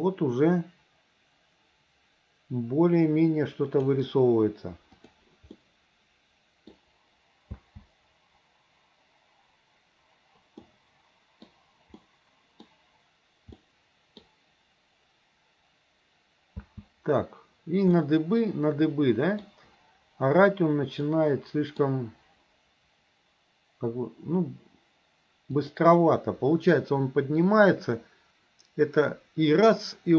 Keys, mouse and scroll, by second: 5.0 click, 5.6-6.8 middle drag, 7.6 space, 10.6-11.5 middle drag, 12.0 middle click, 13.6 middle click, 16.6 space, 18.0-19.5 middle drag, 21.2 middle click, 25.6 click.